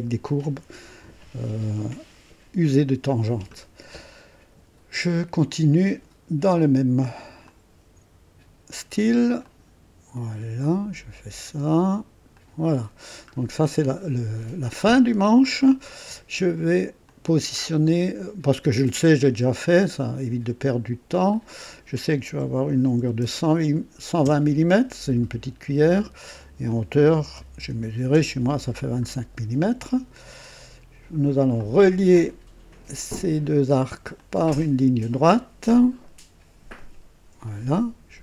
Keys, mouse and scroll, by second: 7.4 click, 9.4 click, 10.6 click, 12.3 click, 13.1 scroll down 1, 14.4 scroll up 1, 14.8 right click, 15.6 right click, 17.0 click, 19.6 click, 21.2 click, 22.7 KP_1, 22.9 KP_2, 23.2 KP_0, 24.2 KP_Enter, 26.1 click, 26.1 typing, 27.3-28.0 typing, 28.0 KP_Enter, 31.5 click, 34.1 click, 36.7 click, 37.4 right click.